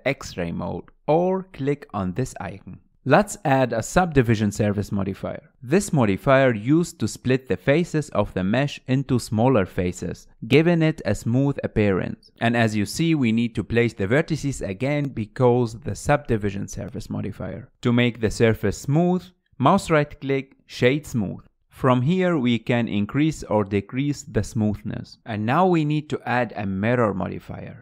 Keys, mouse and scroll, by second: 1.2-3.6 scroll down 9, 3.6-5.7 drag, 5.7 scroll up 1, 6.0-8.6 shift+middle drag, 9.2 drag, 11.5-13.7 drag, 14.3 alt+z, 14.7 click, 15.2 scroll up 1, 15.2 shift+middle click, 15.3 click, 15.5-17.9 typing, 16.2 scroll up 3, 16.4 click, 16.7 click, 17.1 shift+middle click, 17.3 click, 17.8 shift+middle click, 17.9 click, 18.0-19.7 middle drag, 20.5-21.9 right drag, 21.9-22.2 scroll up 2, 22.2 shift+middle click, 23.6-27.8 drag.